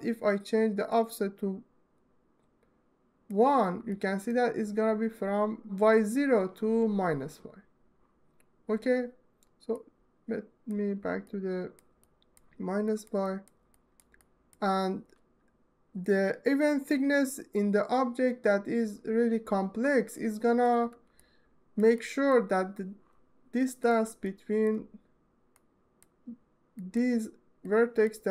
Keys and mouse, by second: 2.5-4.0 drag, 12.0 alt+middle click, 13.6 alt+click, 14.0 ctrl+alt+click, 14.6 alt+shift+click, 14.6 alt+shift+middle click, 15.0 alt+middle click, 21.9 alt+middle click, 22.9 ctrl+alt+middle click, 24.6 click, 25.1 alt+shift+middle click, 26.3 click, 27.5 click.